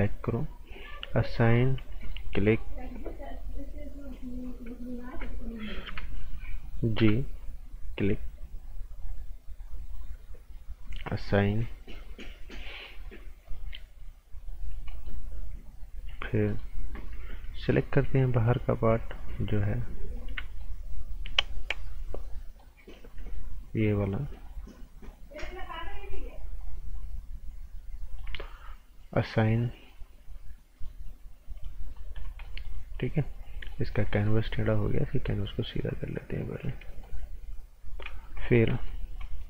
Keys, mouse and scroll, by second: 1.3 right click, 2.0 alt+right click, 3.3 click, 5.0 g, 6.7-7.4 typing, 7.8 ctrl+click, 9.6 ctrl+click, 13.4 click, 14.7 scroll down 1, 15.3-16.1 scroll up 1, 16.5 alt+right click, 17.8 g, 19.2 click, 20.6 ctrl+right click, 23.1 ctrl+click, 26.6 ctrl+click, 30.7 click, 31.8-32.1 scroll down 1, 32.4 right click, 32.8-33.5 scroll up 1, 33.5 scroll down 1, 33.7 right click, 34.2 ctrl+right click, 36.9 right click, 37.2 scroll up 1, 38.0 right click, 39.0 scroll up 1, 39.2 right click.